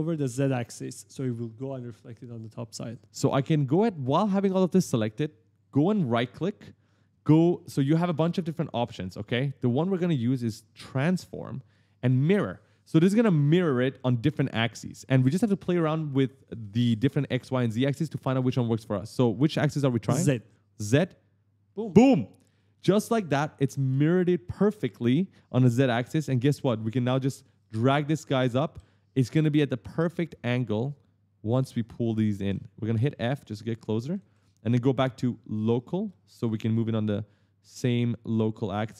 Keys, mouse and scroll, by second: 0.0-1.7 typing, 5.8 right click, 20.7 click, 21.6 right click, 26.4 click, 27.4 right click, 27.5 e, 28.1 w, 29.5 click, 30.7 click, 32.0 right click, 32.0 d, 33.1 right click, 33.2 w, 33.9 s, 35.4 click, 35.9 right click, 36.1 s, 37.5 click.